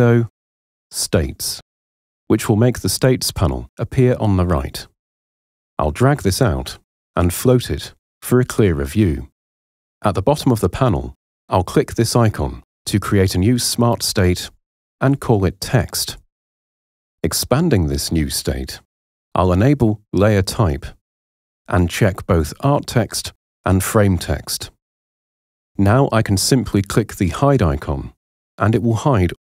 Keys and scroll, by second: 14.2-15.6 typing, 16.1 Return.